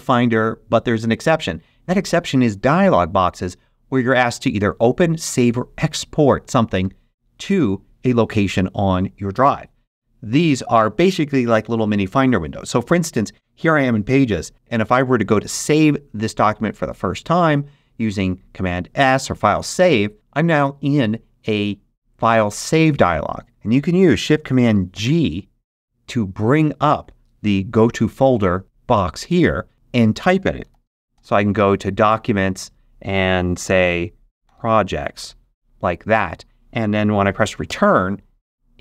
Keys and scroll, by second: 19.5 super+d, 24.9 shift+super+g, 30.3-31.6 typing, 34.2-35.0 typing, 35.1 Tab, 37.6 Return.